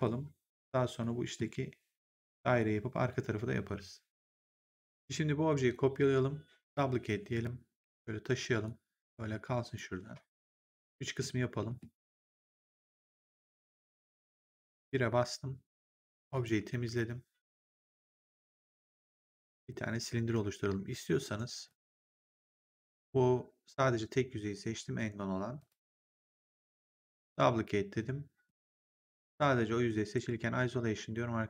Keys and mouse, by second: 0.9 middle click, 4.7 click, 7.2 click, 7.7 w, 8.5 click, 10.2 click, 11.7 middle click, 13.0 click, 14.7 1, 16.3 click, 21.1 right click, 21.6 click, 25.5 click, 27.0 click, 28.4 right click, 29.0 click.